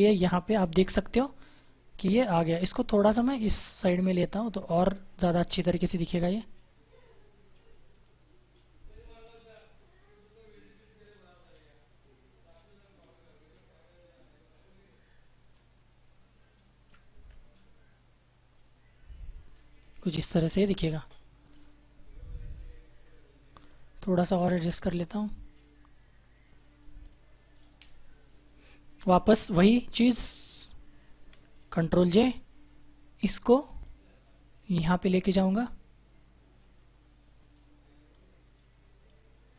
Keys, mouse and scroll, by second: 2.5 Right, 7.8 click, 10.9 click, 19.7 click, 23.5 click, 26.9 click, 30.3 click, 31.9 ctrl+j, 33.7 click, 38.0 click.